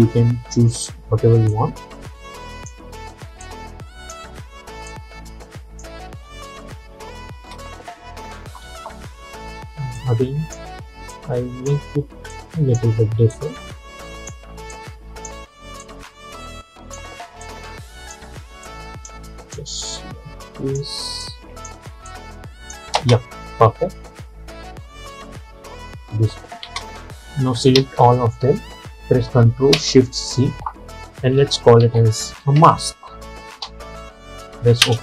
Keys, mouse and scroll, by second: 6.2 space, 8.3 -, 8.4 -, 8.7 -, 9.7 -, 10.1-23.1 drag, 23.1 space, 26.7 space, 27.8 ctrl+a, 30.3 ctrl+shift+c, 31.9-33.7 typing, 34.9 Return.